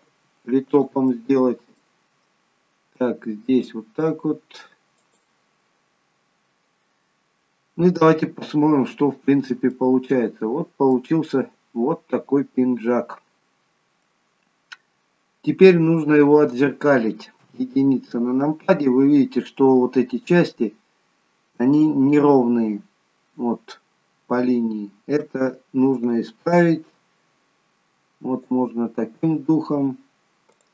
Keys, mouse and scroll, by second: 0.0 g, 1.0 middle click, 3.0 click, 4.2 g, 5.8 scroll down 1, 6.3-6.7 scroll up 1, 7.2-8.7 scroll up 1, 9.1 Tab, 9.8 middle click, 9.8-11.3 scroll down 1, 11.3 middle click, 17.4 KP_1, 23.3-24.1 scroll down 2, 25.3 Tab, 26.0 click, 30.0-30.7 scroll up 2, 30.5 click.